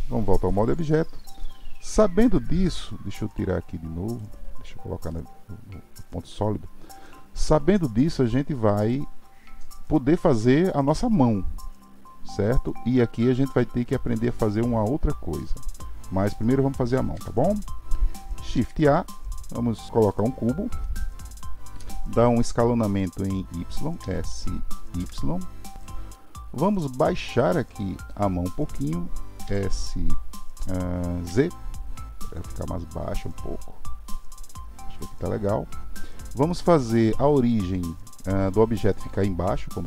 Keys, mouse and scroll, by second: 0.4 Tab, 0.9-4.1 middle drag, 4.1-5.1 drag, 5.1-8.2 middle drag, 20.8-24.0 middle drag, 26.1-29.4 middle drag, 29.4 s, 36.5-39.5 middle drag.